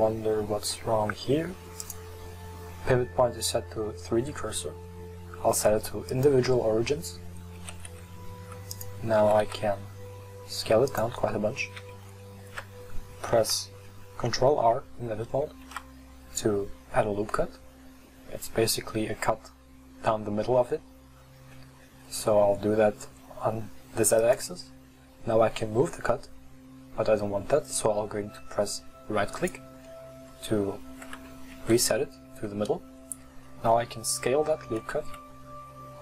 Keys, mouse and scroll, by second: 1.8-5.0 drag, 7.6 g, 9.3 s, 11.7 click, 11.8 Tab, 15.7 ctrl+r, 17.1-18.7 drag, 31.6 s.